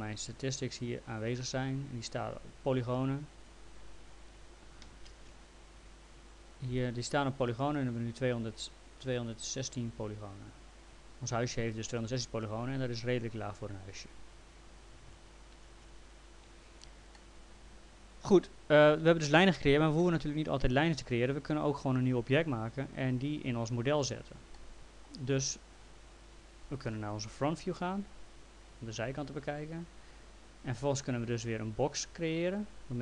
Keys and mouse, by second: 0.6 click, 5.1 ctrl+shift+d, 17.2 alt+middle click, 20.0 alt+middle click, 24.6 alt+middle click, 27.6 f, 29.9 click, 32.2 click.